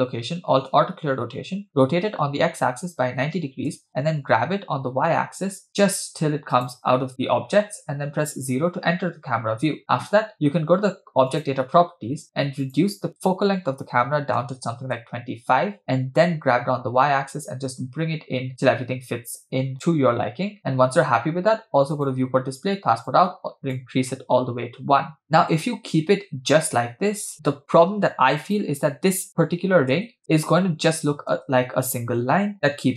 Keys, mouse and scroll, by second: 0.7 alt+r, 1.7 r, 4.7 g, 8.1 KP_0, 11.3-14.8 drag, 16.2 g, 19.7 g, 21.9 click, 22.3-22.8 scroll down 2, 23.1 click, 25.2 space, 27.3 space, 28.4 click, 29.9 space, 30.2 space, 31.4 space.